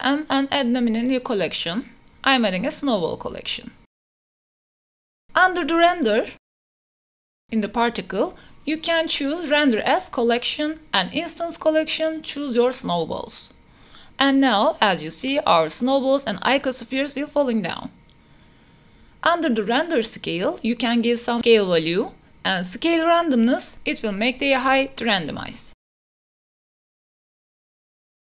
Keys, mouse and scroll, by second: 0.6 m, 3.1 l, 3.4 Return, 3.9 KP_0, 8.6 click, 10.1-11.1 drag, 12.2-14.5 drag, 15.9 space, 16.5 a, 18.6 space, 18.6 a, 19.5 click, 20.7-22.9 drag, 23.1 space, 24.7 space, 25.0-26.1 drag, 26.3 space, 27.5 space, 28.0 click.